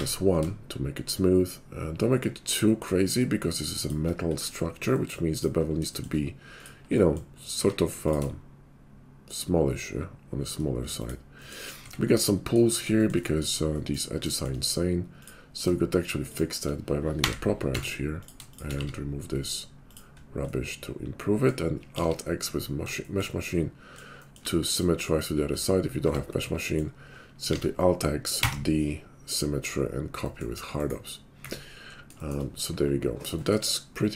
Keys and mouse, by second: 4.0-11.8 middle drag, 7.5 q, 11.8 Tab, 12.6-18.0 shift+middle drag, 17.2 j, 17.7 Tab, 18.0 click, 18.2-27.4 shift+middle drag, 18.8 x, 21.9 alt+x, 26.0 Tab, 27.5 alt+x, 29.5-34.1 middle drag.